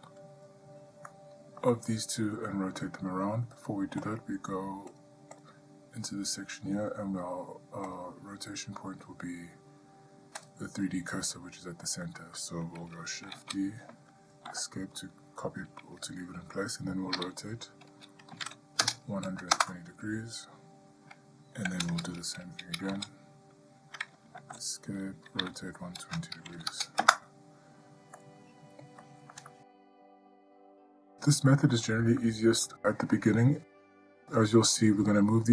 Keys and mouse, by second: 1.3-1.8 middle drag, 4.2 click, 5.1 click, 5.7-8.2 drag, 10.7 click, 12.3-12.6 shift+middle drag, 13.6 shift+d, 17.4 r, 23.2 shift+d, 25.6 r, 28.4-29.2 middle drag, 29.7-30.0 shift+middle drag, 30.8-31.2 middle drag, 31.5-32.0 shift+middle drag, 34.5-34.9 middle drag.